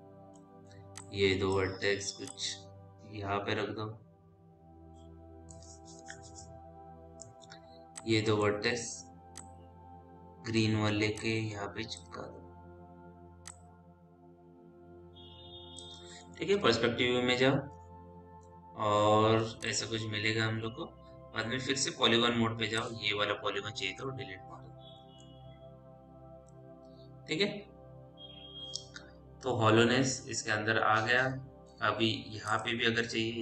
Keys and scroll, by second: 17.0 p, 22.4 4, 23.8 Delete.